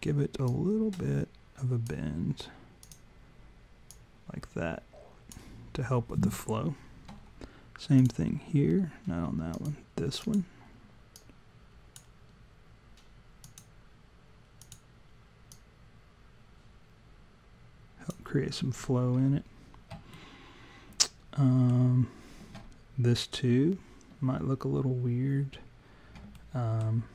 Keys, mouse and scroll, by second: 0.5 click, 2.9 click, 3.9 click, 8.0 click, 9.6 click, 10.2 click, 11.2 click, 13.4 click, 14.6 click, 15.5 click, 20.2 alt+middle click, 26.4 alt+middle click.